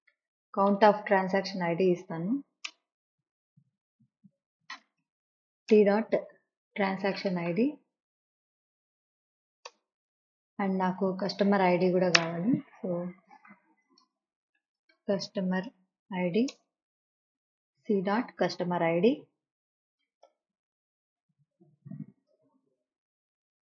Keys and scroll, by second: 0.0-1.2 typing, 2.5 Down, 2.7 Return, 3.7 Left, 4.6-8.2 typing, 9.3 Down, 9.7 Return, 12.2-15.4 typing, 12.7 Left, 16.5 Return, 17.2 Left, 19.8-20.8 typing, 22.3 ,, 23.2 Right.